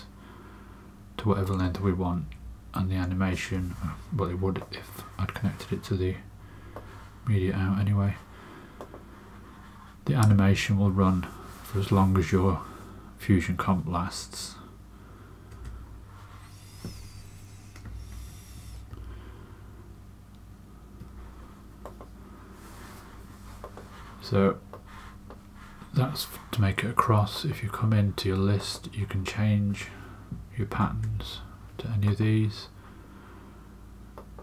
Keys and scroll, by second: 2.1 space, 10.0 space, 15.5 space, 18.0 super+z, 30.8 space.